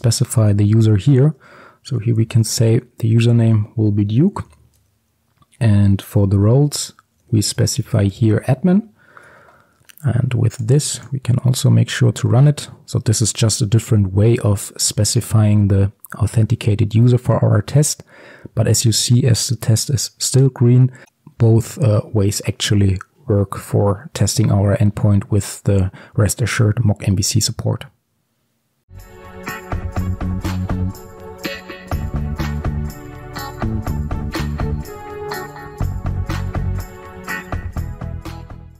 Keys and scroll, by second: 1.2 Return, 9.6 ctrl+s.